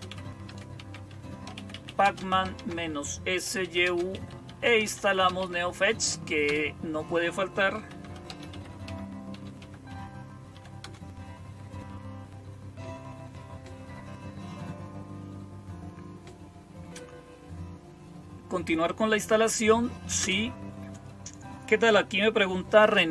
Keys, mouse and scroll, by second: 0.0-11.6 typing, 20.1 Return.